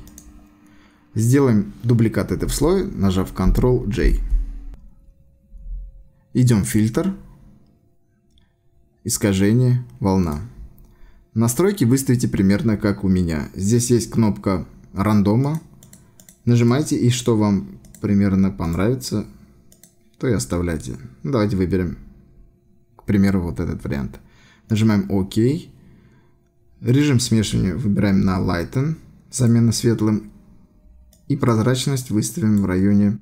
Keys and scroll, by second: 4.0 ctrl+j.